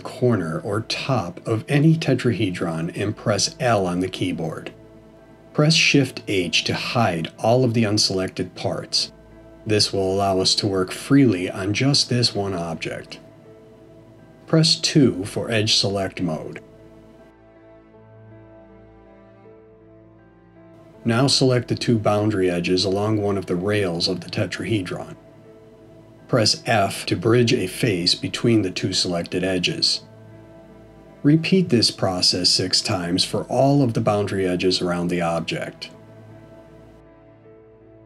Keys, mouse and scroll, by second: 0.4 l, 6.7 shift+h, 9.9 middle click, 15.8 2, 22.4 click, 24.6 shift+click, 27.3 f, 28.4 click, 29.3 shift+click, 31.0 f, 31.9 click, 32.8 shift+click, 33.9 f, 34.7 middle click, 37.7 click.